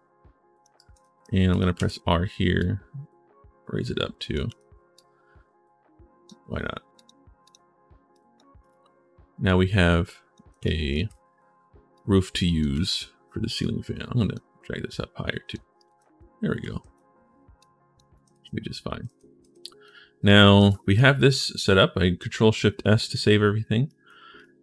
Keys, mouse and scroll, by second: 0.5 right click, 0.7 a, 1.3 right click, 1.5 r, 2.4-4.1 drag, 4.2 w, 4.7-6.0 drag, 6.7 click, 7.2 click, 7.9 click, 8.4 click, 10.4 right click, 10.5-11.2 typing, 11.7 right click, 12.5 w, 13.4 click, 14.6 click, 15.4-16.6 typing, 15.5-16.7 right drag, 17.9-19.6 right drag, 18.0-19.7 typing, 20.0 right click, 20.4 ctrl+shift+s, 20.7 right click, 20.8-21.6 typing, 22.8 right click, 23.6 right click, 24.1 click.